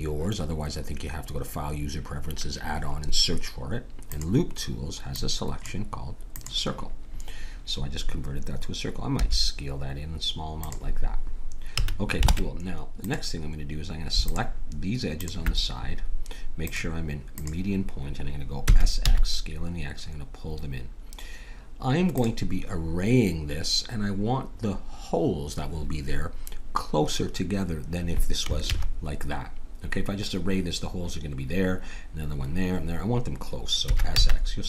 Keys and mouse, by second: 4.0-9.2 drag, 9.2 s, 11.7 a, 12.2 ctrl+Tab, 14.2 click, 18.2 click, 18.7 s, 28.7 ctrl+z, 33.8 s.